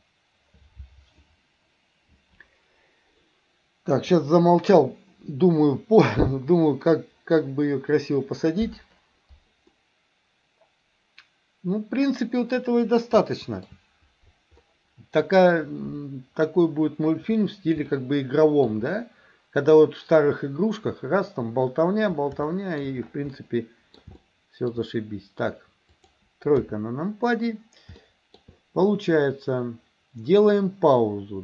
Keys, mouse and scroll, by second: 9.7-12.4 middle drag, 13.2-13.7 shift+middle drag, 14.7 middle click, 17.9-18.7 shift+middle drag, 18.9-20.8 middle drag, 22.5-22.9 shift+middle drag, 23.4-24.0 middle drag, 24.2-24.8 shift+middle drag, 26.0 click, 26.6 KP_3, 28.1 middle click.